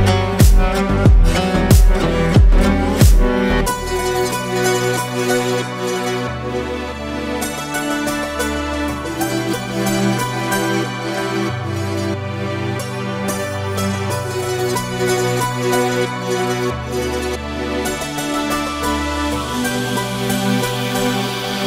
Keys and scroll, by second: 3.5 ctrl+space, 17.0 ctrl+space.